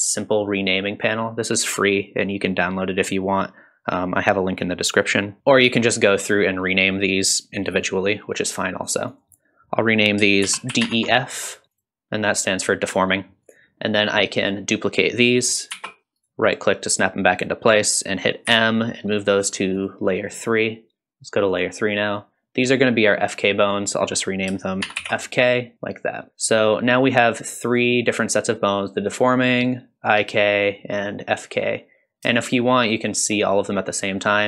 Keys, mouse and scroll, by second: 9.1-11.6 drag, 11.7 click, 13.4 click, 14.0 click, 15.7 shift+d, 18.5 m, 21.5 click, 22.2 click, 23.6-25.9 drag, 26.0 click, 27.6 click, 29.4 click, 30.6 click, 32.4 shift+click, 32.9 shift+click, 34.0 click.